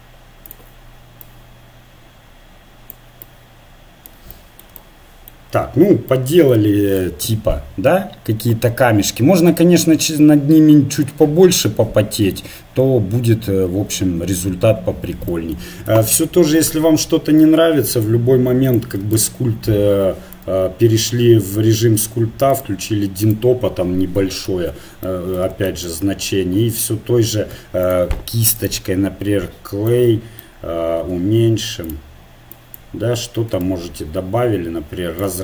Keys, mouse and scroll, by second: 0.4-2.5 drag, 3.5 middle click, 6.5 Tab, 7.5-10.8 middle drag, 15.9 Tab, 16.8 Tab, 18.8 Tab, 19.2 click, 22.5-25.1 drag, 25.1-27.8 middle drag, 27.8-29.9 drag, 29.9-31.8 middle drag, 31.0 f, 32.5-35.4 drag.